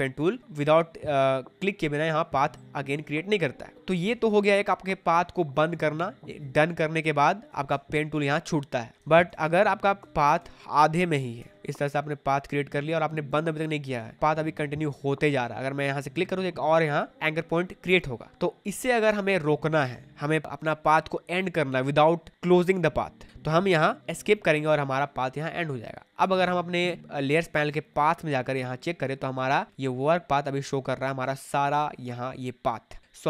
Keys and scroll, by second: 3.7 ctrl+z, 7.6 space, 8.9 ctrl+z, 11.3 Escape, 13.9 space, 24.2 Escape, 29.7 space, 31.6 space.